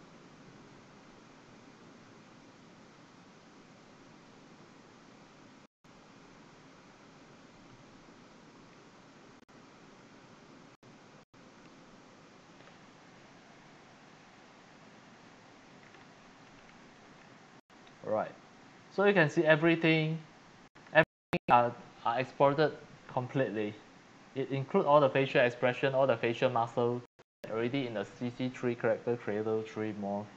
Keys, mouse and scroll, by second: 6.5 click, 7.2 scroll, 7.8-8.6 scroll, 8.6-9.8 scroll down 7, 9.8 scroll, 12.9 scroll, 15.7-16.6 scroll down 8, 16.7 scroll, 16.9 scroll down 1, 17.1 scroll down 1, 17.2-17.5 scroll, 18.3-21.5 scroll down 22, 21.5-21.8 scroll up 2, 22.9 scroll, 24.2 scroll down 1, 24.8 scroll down 1.